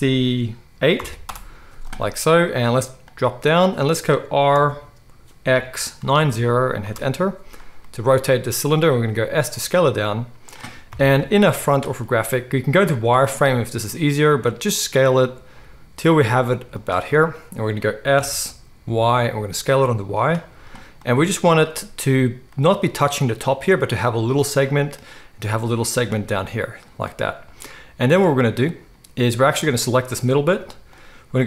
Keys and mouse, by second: 2.6 middle click, 2.6 right click, 4.5 r, 9.1 s, 10.5-26.9 drag, 10.8 KP_1, 11.2 z, 13.0 z, 13.8 s, 18.1 s, 26.9-31.0 right drag, 29.6 click, 29.6 middle click, 30.5 g, 31.0-31.4 middle drag.